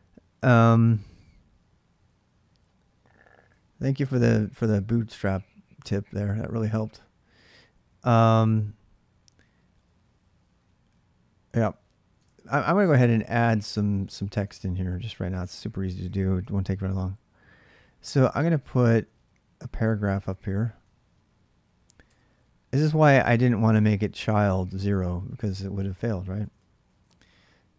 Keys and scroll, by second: 0.9-2.0 typing, 7.3 j, 8.2 alt+Tab, 11.9 alt+Tab, 12.9 ctrl+[, 13.0-15.8 typing, 19.3 k, 20.3-21.2 typing, 21.8 Tab, 25.2 <, 26.3-27.7 typing.